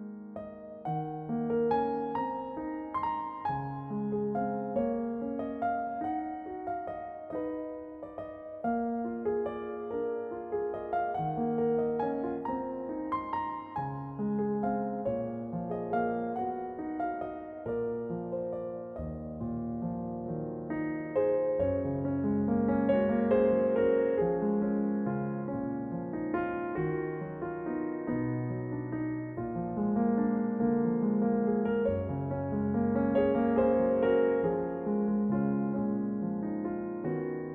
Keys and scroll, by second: 4.1 l, 5.3 shift+d, 9.0 shift+d, 13.9 l, 14.7 g, 17.7 l, 18.0 a, 18.5 l, 19.0 g, 23.4 a, 23.8 l, 24.7 g, 26.4 a, 26.9 l, 28.8 shift+d, 29.7 r, 32.0 g, 33.8 shift+d, 35.8 shift+d, 37.3 r.